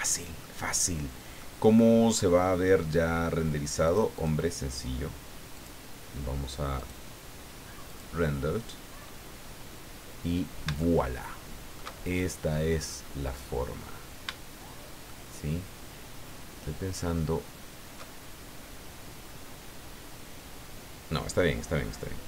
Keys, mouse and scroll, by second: 0.9 scroll down 1, 1.4-2.6 middle drag, 3.8 click, 5.5 click, 6.7 click, 7.8 click, 10.8-11.9 shift+drag, 15.1-18.1 shift+middle drag.